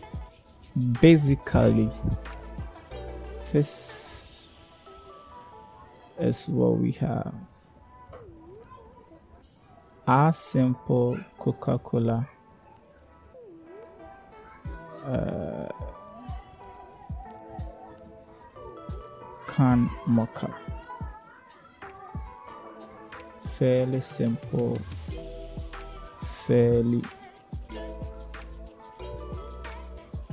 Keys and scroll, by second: 0.4 0, 20.4 ctrl+v, 20.9 Return.